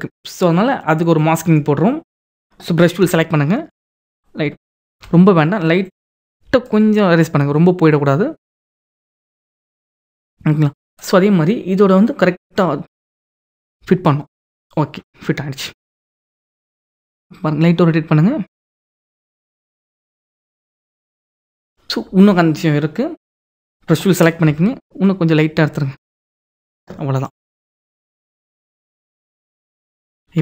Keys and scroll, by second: 2.6 b, 4.5 ctrl+z, 10.3 [, 15.8 ctrl+t, 28.1 ctrl+-.